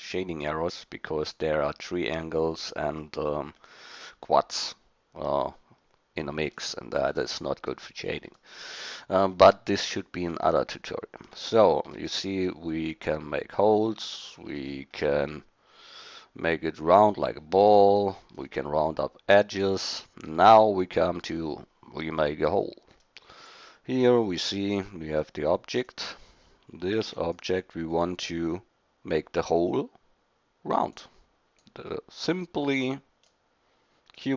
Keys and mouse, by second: 23.4-24.5 middle drag, 24.9-25.8 drag, 25.9-26.4 right drag, 27.0 shift+d, 31.7-32.8 drag, 33.8-34.3 middle drag.